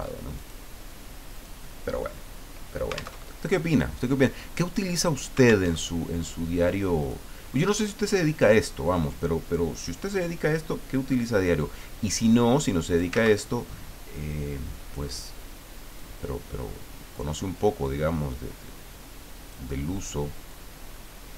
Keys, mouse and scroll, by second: 0.3 click, 1.3 click, 3.2 alt+Tab, 5.7 alt+Tab, 7.0 click, 8.4 click, 9.9-11.6 drag, 12.1 click, 13.2 ctrl+z, 13.7-15.0 drag, 15.9-17.6 drag, 17.9-19.7 drag, 20.4-21.3 drag.